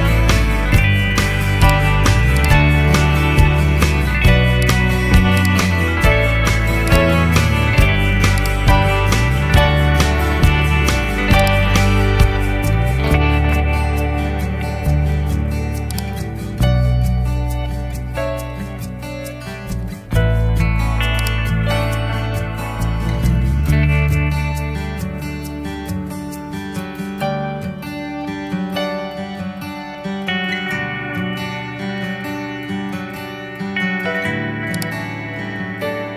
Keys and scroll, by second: 25.2-27.4 typing, 28.9 Return.